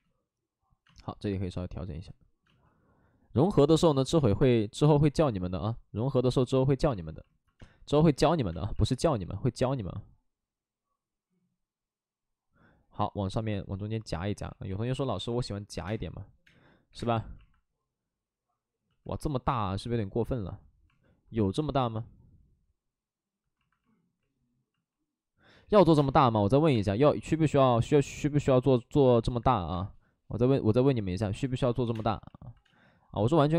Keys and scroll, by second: 7.5 space, 8.5 space, 8.7 ctrl+z, 9.1 w, 14.8-16.9 typing, 25.9 3, 25.9 space, 26.7 space, 29.0 space, 31.8 2, 31.9 space.